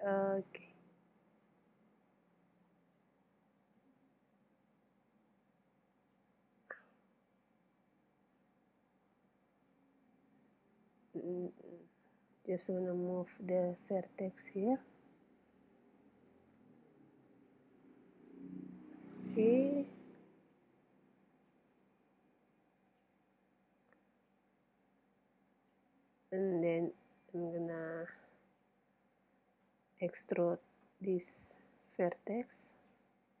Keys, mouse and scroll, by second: 3.9-11.3 middle drag, 10.7 a, 11.5 b, 16.0 g, 17.9-19.7 drag, 20.0 KP_7, 22.1-24.0 middle drag, 24.0 click, 24.2 middle click, 24.9 click, 28.1 a, 28.5 b, 31.3-33.4 middle drag.